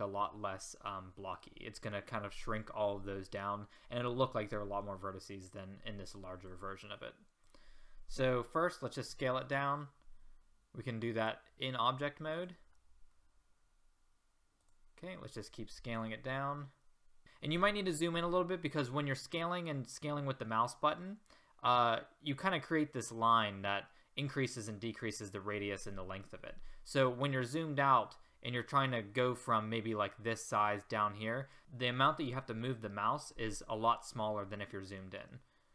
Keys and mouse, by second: 0.0-6.5 middle drag, 6.5-7.5 drag, 9.0 s, 13.2-13.6 middle drag, 16.0 click, 16.0 s.